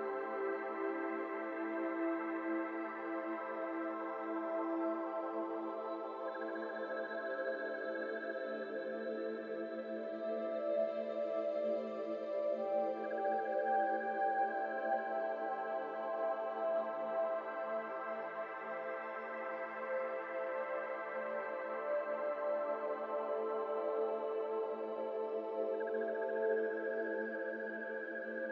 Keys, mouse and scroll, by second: 0.5 click, 1.9-5.1 drag, 5.1 shift+d, 5.8 r, 11.2 middle drag, 11.4-11.9 scroll up 2, 11.9 shift+middle drag, 12.2 click, 13.8 click, 14.5 click, 26.2 click, 27.0 click, 27.6 click.